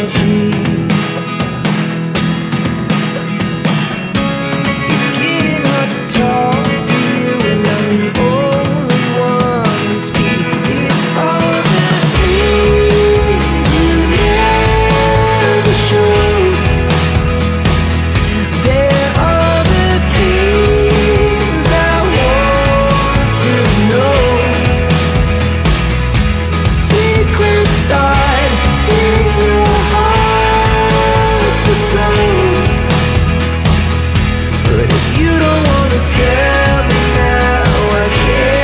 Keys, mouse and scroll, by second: 2.1 click, 4.3 click, 6.2 click, 8.1 click, 9.8 click, 15.5 click, 18.4 scroll down 1, 18.8-20.0 scroll up 1, 20.0 click, 20.8 alt+click, 23.0 alt+click, 27.0 click, 27.7 click, 28.4 click, 29.5 click, 34.0-34.3 scroll down 1, 34.9 Delete, 36.3 click, 37.6 click.